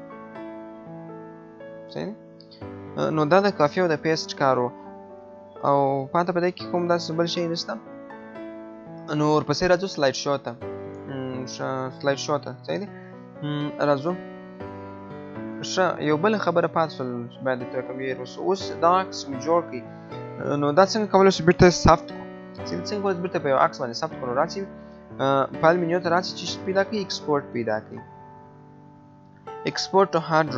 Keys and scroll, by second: 0.0 ctrl+z.